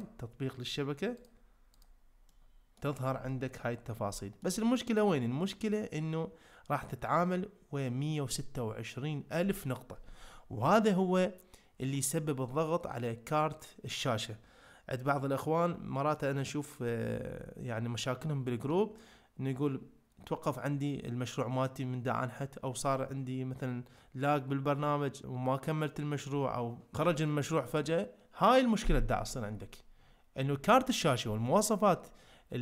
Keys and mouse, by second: 1.2-1.9 drag, 2.3-2.8 middle drag, 3.3 shift+middle drag, 4.2 shift+middle click.